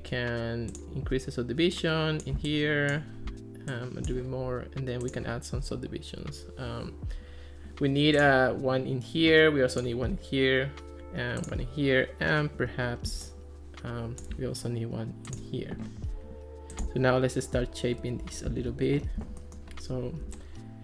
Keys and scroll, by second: 18.5 alt+r.